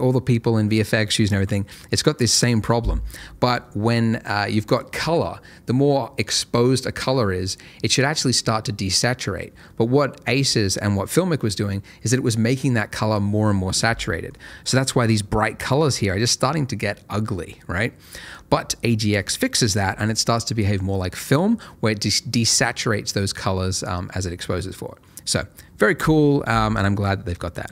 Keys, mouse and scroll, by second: 14.3-15.6 scroll up 1, 15.6-18.3 scroll down 1, 18.3 click.